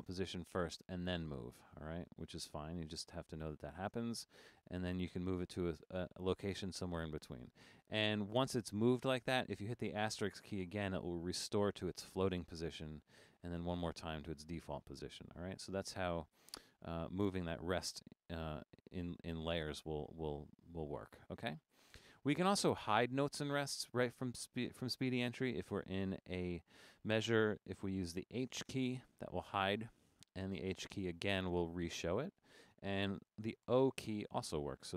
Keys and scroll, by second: 10.6 *, 12.9 Down, 13.1 Down, 13.6-14.6 typing, 28.5 h, 28.9 Right, 29.4 h, 29.7 Right, 29.8 h, 30.8 Left, 31.1 h, 31.5 Left, 31.7 h, 33.7 o, 34.0 Right, 34.2 o, 34.5 Right, 34.8 o.